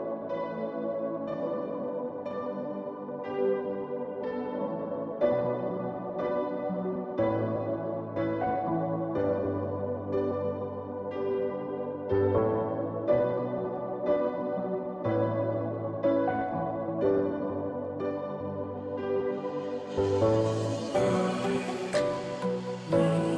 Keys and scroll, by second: 0.0-23.3 typing, 22.9 ctrl+t.